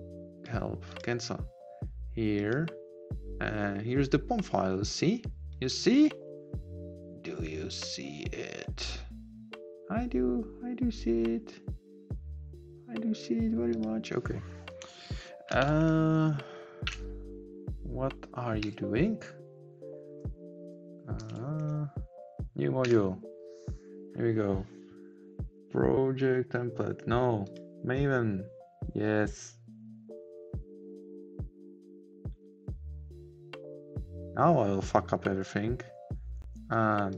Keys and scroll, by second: 15.9 ctrl+shift+a, 21.5 ctrl+shift+a.